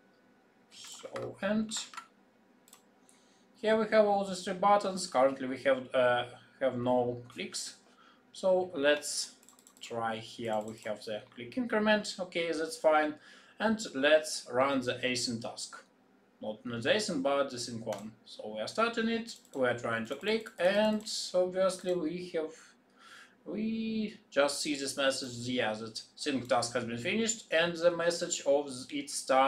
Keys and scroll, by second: 1.6 ctrl+shift+b.